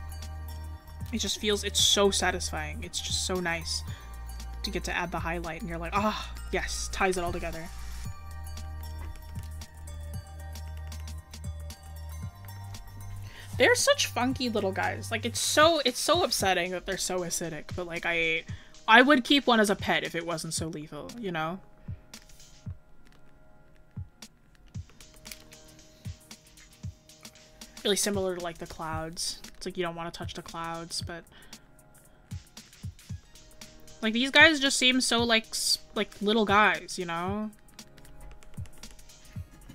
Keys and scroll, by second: 17.5 scroll up 1.